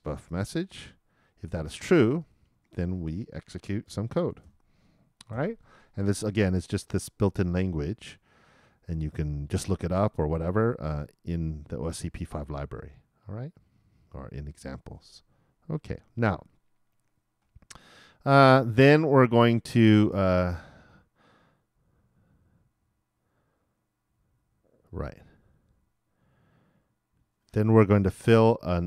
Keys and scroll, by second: 0.3 shift+0, 3.8 shift+[, 4.2 shift+Return, 4.8 shift+Return, 5.3 shift+].